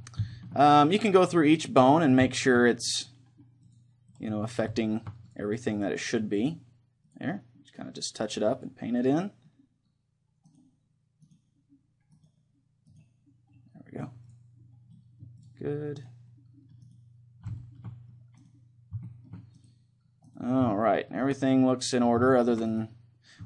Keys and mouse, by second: 1.5-2.9 right drag, 4.2-10.2 drag, 4.2 middle click, 4.8-6.5 middle drag, 7.4-10.7 middle drag, 10.7-14.7 right drag, 13.8-23.4 middle drag, 14.3-17.1 drag, 16.3-23.4 right drag.